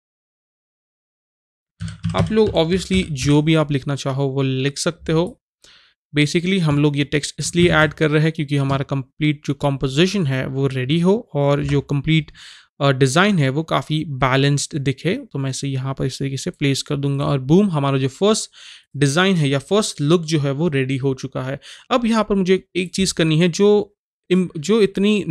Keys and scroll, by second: 0.0-3.7 typing, 7.7 ctrl+shift+z, 11.6 Return.